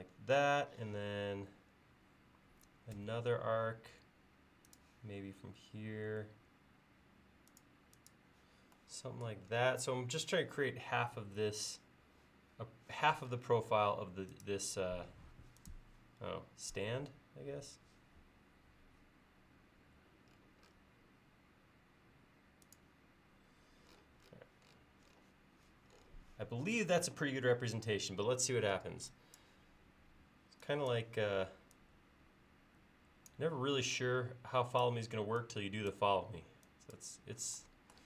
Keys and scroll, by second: 3.1 a, 28.8 e.